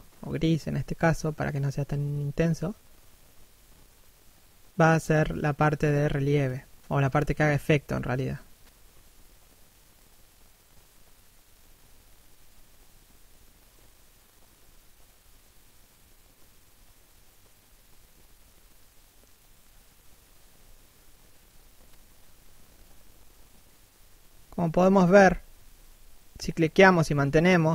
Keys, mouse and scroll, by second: 0.0 right click, 1.6 right click, 1.9 click, 2.7 middle click, 3.6 click, 5.8 click, 6.4 middle click, 12.6 click, 13.8 middle click, 14.7-16.6 scroll up 1, 18.3 click, 19.0 middle click, 20.0 1, 20.5 shift+middle click, 20.7-21.5 scroll down 1, 22.3 ctrl+1, 23.0 scroll up 1, 23.2 middle click, 25.0 click, 26.7 click.